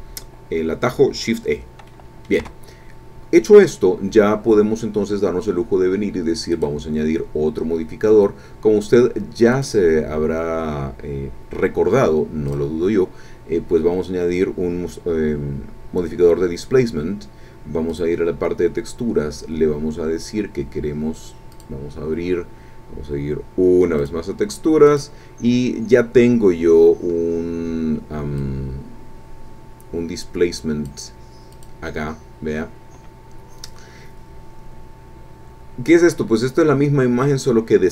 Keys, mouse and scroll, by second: 1.9 click, 2.4 Tab, 6.5 click, 9.5 click, 12.5 click, 17.9 click, 21.5 click, 24.0 click, 24.9 click, 25.3-26.4 scroll down 6, 27.0 scroll down 2, 28.4-31.0 drag, 31.5 click.